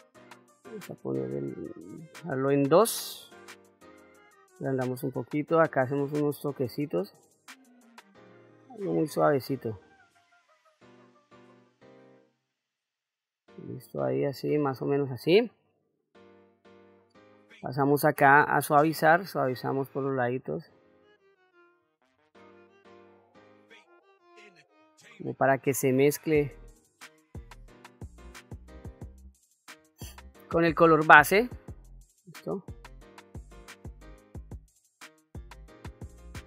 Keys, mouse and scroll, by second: 5.8 click, 6.8 click, 7.6 click, 8.4 click, 9.3 click, 10.2 click, 11.3 click, 12.0 middle click, 13.4 click, 14.2 click, 15.1 middle click, 16.0 click, 17.8 click, 19.1-20.7 drag, 21.7 f, 22.9-29.8 drag, 30.4-32.1 middle drag, 32.7 click, 33.3 click, 34.1 middle click, 35.6 click.